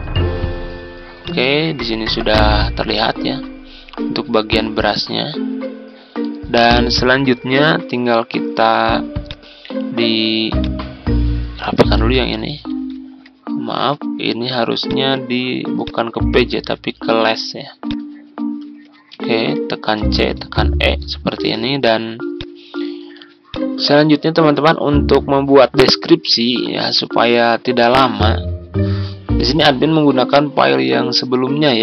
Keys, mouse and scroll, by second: 2.0 ctrl+scroll down 1, 3.6 ctrl+scroll up 1, 9.2 click, 9.7-10.5 ctrl+scroll down 1, 10.5 click, 11.6-11.9 typing, 12.6 ctrl+z, 14.8 click, 19.1 Home, 19.9-20.3 typing, 21.3 ctrl+g, 22.3 click.